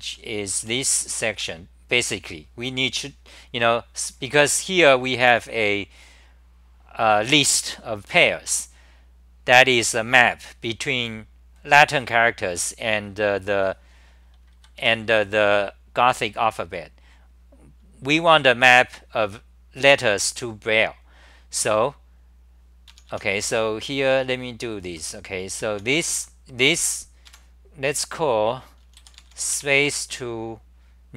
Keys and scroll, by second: 0.0-1.9 typing, 14.5 ctrl+g, 14.8 super+=, 22.9-27.3 typing.